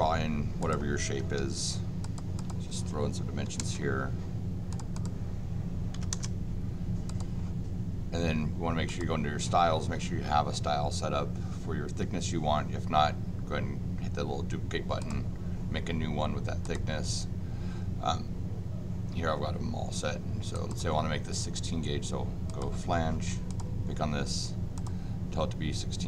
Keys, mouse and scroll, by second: 0.6 click, 1.4 d, 2.0 click, 2.3 click, 4.7 click, 4.9 click, 7.0 click, 8.8 click, 15.0 click, 16.6 click, 20.5 click, 22.4 click, 23.5 click, 24.7 click.